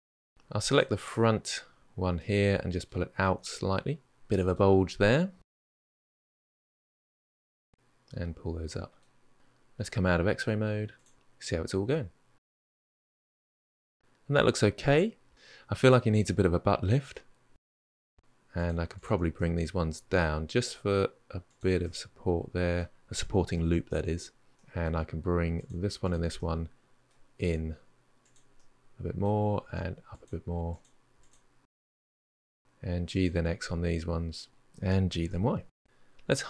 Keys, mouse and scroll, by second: 0.0 middle click, 0.5 click, 0.9-3.0 middle drag, 3.0 g, 4.7-6.4 middle drag, 6.4 click, 6.6 middle click, 6.9 g, 7.2-9.3 middle drag, 9.3-9.9 scroll down 2, 10.7-11.6 drag, 11.6-12.9 middle drag, 15.7 click, 15.9 shift+click, 16.0 middle click, 16.2 g, 16.7 middle click, 17.6 middle click, 18.3 click, 18.7 shift+click, 19.1 middle click, 19.7 g, 21.6 scroll up 1, 21.6-25.4 middle drag, 25.4 click, 25.8 shift+click, 26.1 middle click, 27.1 g, 27.7 middle click, 28.2 g, 28.8 click, 29.0 g, 29.6 click, 29.8 shift+click, 30.1 g, 33.1-34.6 middle drag, 34.6 g, 35.5-36.4 middle drag.